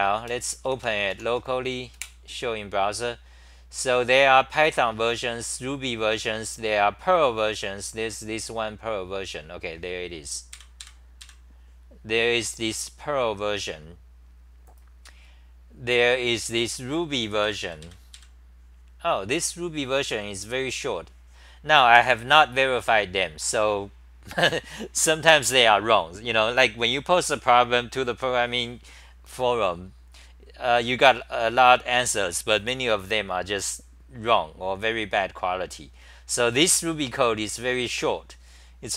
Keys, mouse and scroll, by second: 0.0-0.5 typing, 2.0 super+r.